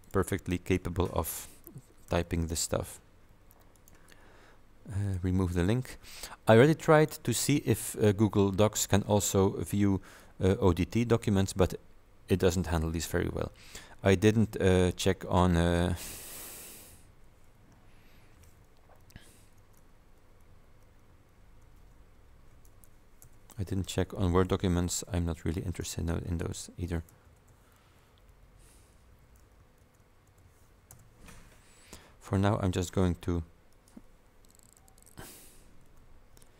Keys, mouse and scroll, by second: 0.1 click, 2.2 ctrl+v, 3.8 click, 5.1 click, 7.0 click, 12.5 click, 15.8 click, 17.2 Home, 18.2 shift+Down, 19.7 ctrl+c, 20.0 ctrl+Down, 21.7 ctrl+v, 22.8 BackSpace, 24.2 Down, 24.6 Right, 24.9 shift+Down, 25.5 shift+Left, 26.3 ctrl+shift+v, 27.2 BackSpace, 28.2 Down, 29.2 shift+Home, 29.9 ctrl+shift+v, 30.3 ctrl+BackSpace, 31.0 BackSpace, 32.5-32.9 scroll down 2, 33.8 click, 34.9 shift+Home, 35.9 ctrl+v, 36.4 ctrl+BackSpace.